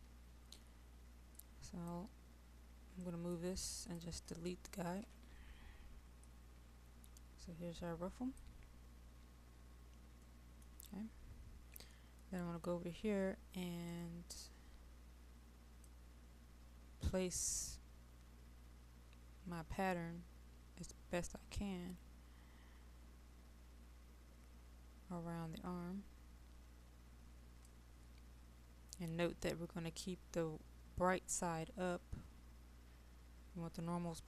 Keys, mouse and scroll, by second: 5.0 Delete, 6.4-8.8 drag, 10.3 middle click, 11.1-11.8 scroll up 1, 11.8 middle click, 13.9-34.2 drag.